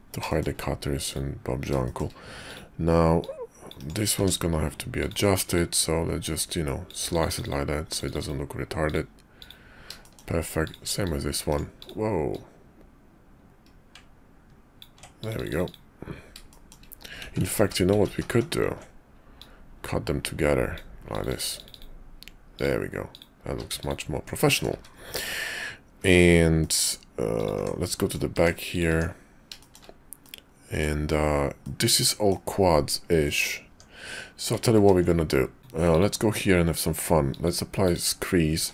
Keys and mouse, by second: 0.3 shift+click, 1.0 click, 1.8 shift+click, 2.5 click, 3.2 click, 4.1 d, 5.5-6.9 drag, 8.8 click, 9.4 click, 10.0 shift+middle click, 10.6 click, 11.0 click, 11.8 click, 12.3-14.8 drag, 15.6 click, 16.5 shift+click, 17.2 ctrl+z, 17.4 ctrl+z, 17.6 ctrl+z, 17.9 ctrl+z, 18.1 ctrl+z, 18.3 ctrl+z, 19.4-20.7 drag, 21.5 click, 21.7 click, 22.5 click, 23.1 click, 23.5 q, 24.4 click, 24.7 `, 25.3 `, 26.0 `, 26.6 click, 27.3 click, 27.5 Tab, 28.0 click, 28.3 Tab, 28.7 click, 28.9 Tab, 29.6 shift+click, 30.2 click, 31.6 click, 31.9 middle click, 33.2 middle click, 33.7 Tab, 34.8 ctrl+`, 38.5 q.